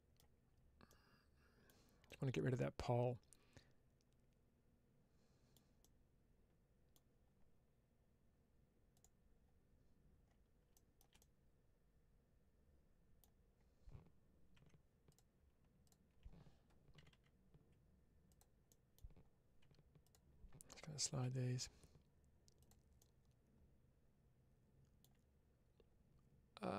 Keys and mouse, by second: 0.9 middle click, 1.9-5.4 middle drag, 5.7-6.8 middle drag, 11.0-13.0 middle drag, 14.4 2, 14.9 click, 18.2 click, 18.5 middle click, 19.5 1, 22.5 click, 22.8-24.9 middle drag.